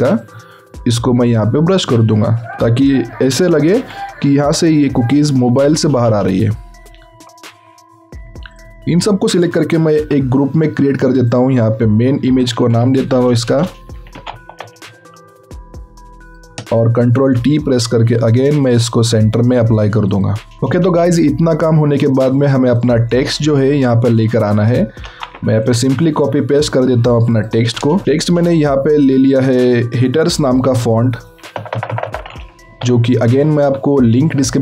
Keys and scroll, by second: 3.7 ctrl+d, 9.9 ctrl+shift+g, 12.4-14.6 typing, 25.0 ctrl+c, 28.0 ctrl+a, 30.6-33.7 typing.